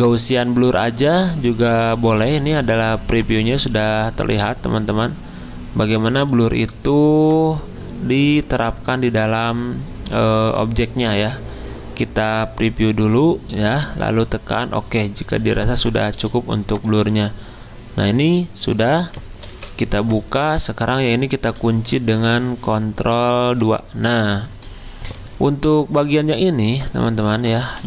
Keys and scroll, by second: 19.5 ctrl+alt+2, 22.2 ctrl+2.